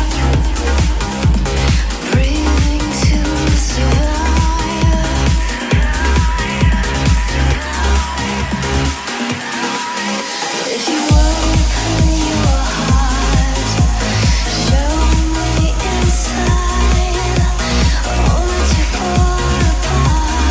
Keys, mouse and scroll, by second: 6.9-8.4 typing, 9.4-12.8 drag, 15.7-16.0 typing, 18.9-20.0 drag.